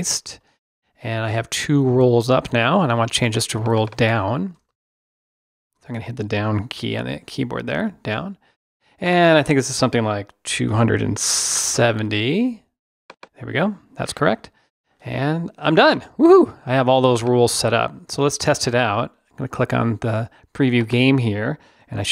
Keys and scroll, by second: 5.6 shift+BackSpace, 7.0 Down.